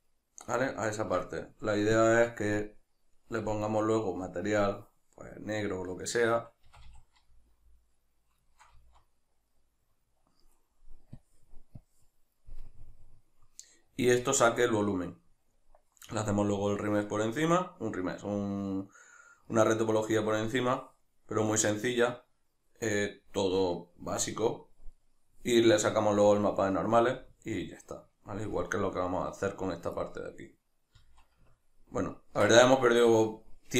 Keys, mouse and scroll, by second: 0.0 right click, 0.7-2.0 ctrl+middle drag, 2.0-6.6 drag, 6.6 a, 7.2 z, 8.5-11.2 shift+middle drag, 8.7 z, 11.2-12.5 drag, 12.5-27.0 middle drag, 31.0 z, 31.5 ctrl+middle click.